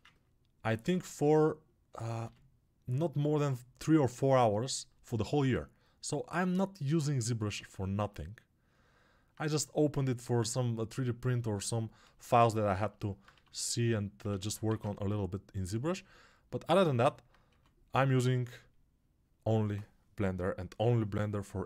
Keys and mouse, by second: 0.6 alt+q, 0.6-21.6 alt+drag, 2.1 g, 13.2 1, 14.2 ctrl+z, 14.6 alt+q, 17.4 2, 20.1 [.